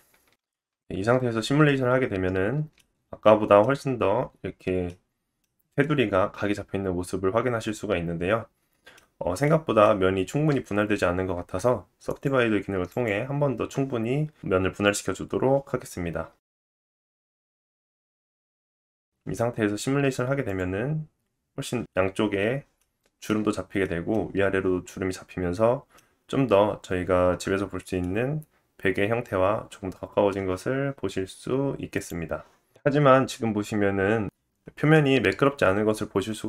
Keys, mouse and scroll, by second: 0.3 ctrl+z, 0.3 Tab, 0.3-6.7 middle drag, 0.3-6.7 right drag, 1.3 space, 2.5 space, 9.0 scroll down 2, 9.4 middle click, 9.9-11.3 scroll up 1, 11.3 Tab, 12.0 right click, 14.7 click, 17.3 Tab, 19.6 click, 20.9 space, 23.8 middle click, 27.9 middle click, 31.9 click, 32.5-33.5 drag, 32.7 middle click, 34.9 middle click, 36.3 scroll down 2.